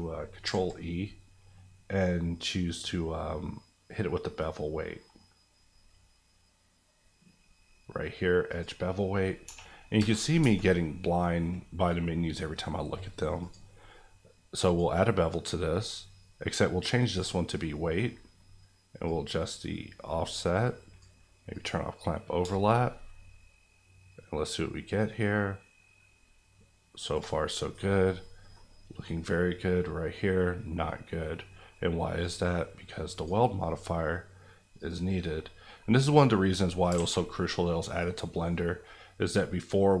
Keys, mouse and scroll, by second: 0.4 ctrl+e, 8.5 click, 9.4 1, 9.9 KP_Enter, 10.4 Tab, 10.8 middle click, 13.4 click, 17.5-18.1 scroll up 2, 17.6 middle click, 19.0 click, 22.7 shift+click, 23.9-26.4 shift+drag, 26.4-27.4 shift+drag, 27.4 scroll down 1, 28.1 middle click, 28.6 scroll up 1, 29.0 middle click, 32.2 click, 35.5 scroll down 1, 35.8 middle click, 36.9 alt+a, 37.4 middle click, 38.5 middle click, 38.8-40.0 scroll up 1.